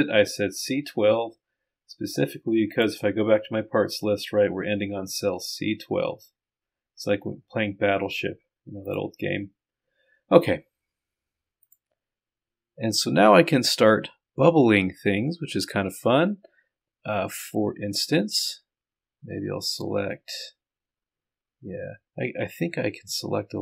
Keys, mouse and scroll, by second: 18.4-20.6 drag, 21.9 click.